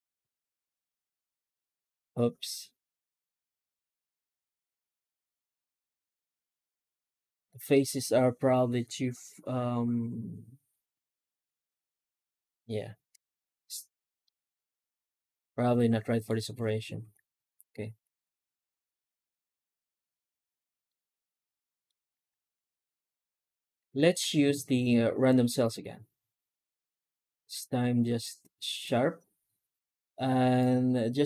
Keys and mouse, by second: 14.1-16.1 middle drag, 16.9 ctrl+z, 18.2 alt+shift+z, 19.4 alt+shift+z, 20.7 middle click, 22.0 alt+shift+z, 22.4 Tab, 23.2 alt+a, 23.9 Tab, 24.4 shift+q.